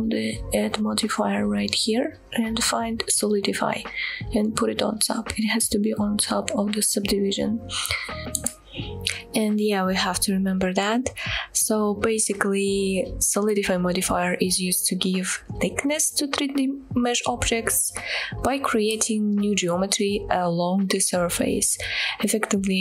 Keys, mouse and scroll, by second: 1.4-3.2 drag, 4.4-5.4 drag, 7.7-8.2 middle drag, 8.7-9.0 shift+middle drag, 9.2-10.4 middle drag, 11.9-12.3 shift+middle drag, 19.6 middle click.